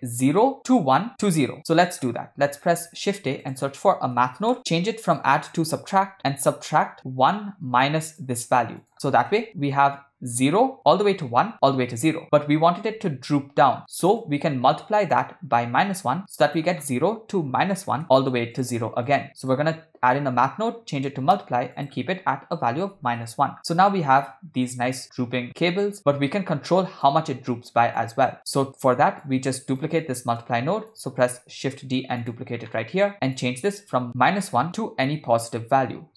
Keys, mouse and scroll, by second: 1.6-2.1 middle drag, 2.8 shift+a, 5.5-6.2 drag, 6.5 middle click, 7.3-8.3 drag, 8.9 click, 14.2-15.3 drag, 15.9 shift+a, 19.4-21.2 drag, 21.8-23.2 drag, 23.7 click, 26.2 click, 28.1 click, 28.5 click, 28.9 click, 29.5 click, 30.0-31.0 drag, 31.4 shift+d, 32.7 middle click, 33.1 click, 33.7 click, 34.5-36.1 drag.